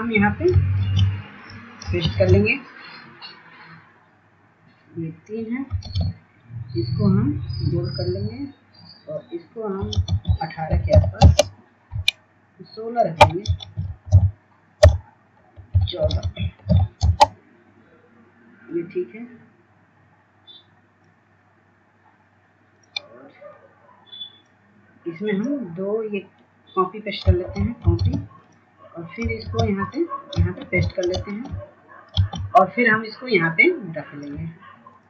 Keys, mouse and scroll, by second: 1.2 ctrl+space, 1.7 click, 3.5 ctrl+space, 4.2 click, 7.3-8.1 scroll down 1, 8.1-8.6 scroll up 1, 8.7 ctrl+space, 10.5 click, 13.6 KP_1, 15.7 click, 16.6 ctrl+a, 16.8 KP_1, 17.8 BackSpace, 18.4 KP_1, 19.2 ctrl+a, 19.4 KP_1, 21.7-24.3 drag, 25.8-30.3 drag, 31.1 ctrl+space, 31.6 click, 32.6 ctrl+space, 33.0 click, 33.7 ctrl+v.